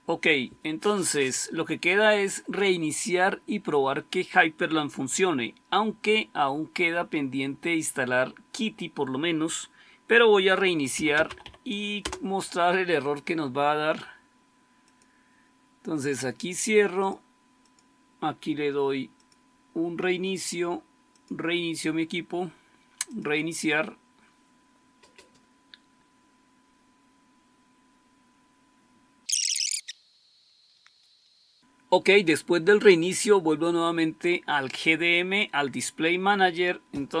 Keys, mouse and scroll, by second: 10.6-11.8 typing, 11.9 Return.